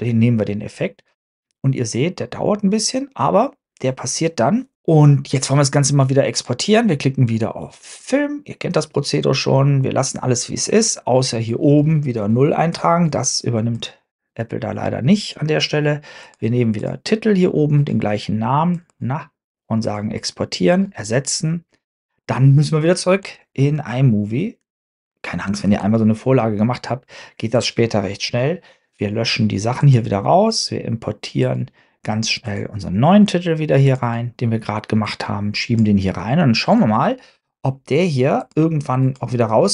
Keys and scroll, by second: 25.7 super+Tab, 26.0 super+Tab.